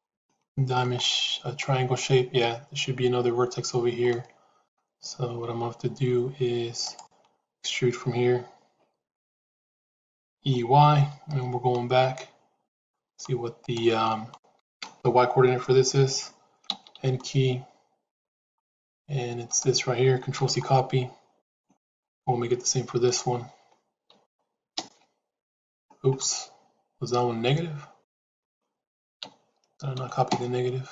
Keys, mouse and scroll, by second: 0.1 shift+middle click, 0.9 middle click, 4.0 middle click, 10.3 e, 16.5 n, 18.1 click, 19.4-21.5 drag, 21.7 click, 22.9-26.1 drag, 28.0-30.9 drag.